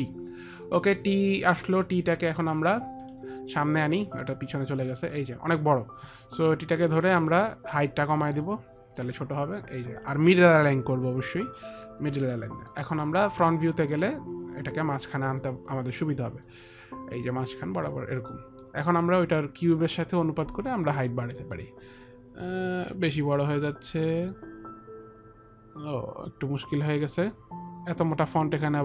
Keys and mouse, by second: 3.3 click, 4.5 click, 8.8 click, 10.9 click, 11.9 click, 12.5 middle click, 13.1 middle click, 13.1 click, 14.2 middle click, 16.7 click, 17.9 click, 21.7 click.